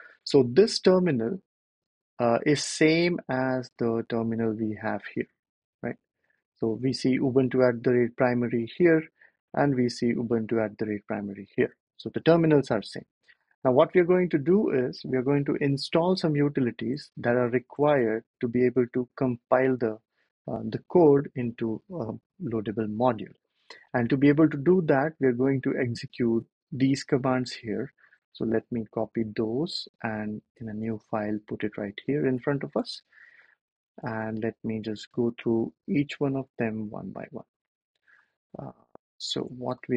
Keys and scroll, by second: 16.7 super+Tab, 17.3 super+Tab, 17.6 super+Tab, 28.3 super+c, 29.7 super+n, 30.7 super+v, 32.7 BackSpace, 33.9 BackSpace, 35.0 BackSpace, 36.3 super+z, 39.6 BackSpace.